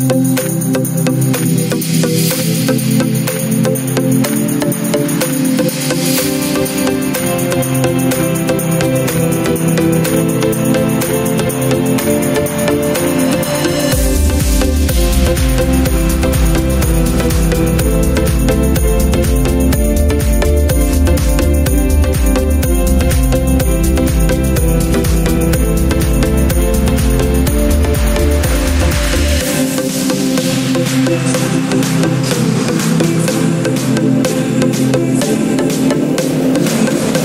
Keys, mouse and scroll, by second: 1.4 r, 4.2-5.6 drag, 8.2 r, 9.4 Up, 9.6 Up, 9.7-10.2 Up, 10.5 Up, 10.7 Up, 10.9 Up, 11.2 Up, 11.4 Up, 11.8 Up, 12.1 Up, 12.4 Up, 12.7 Up, 13.1 Up, 13.4 Up, 14.8 Up, 15.2 Up, 17.0 Up, 17.7 Up, 18.9 click, 23.0 click, 24.1 click, 25.2 click, 31.2 click, 36.2 ctrl+space.